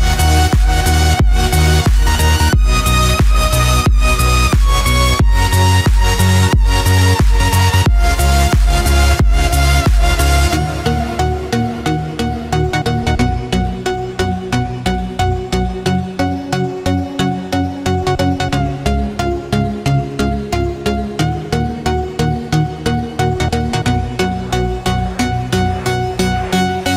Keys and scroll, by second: 0.4 ctrl+space, 11.4 ctrl+=.